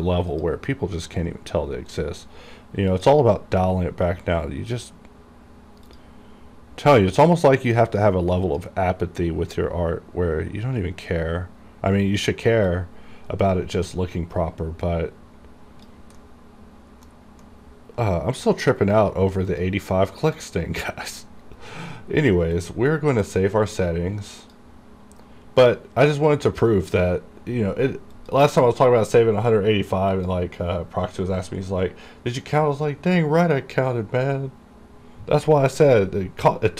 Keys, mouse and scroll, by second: 3.0 click, 3.9-5.7 scroll down 1, 6.0 click, 7.9 click, 10.6 scroll up 1, 12.8-16.3 drag, 16.3 middle click, 17.6-19.6 middle drag, 19.6 click, 22.7 click, 28.3 click.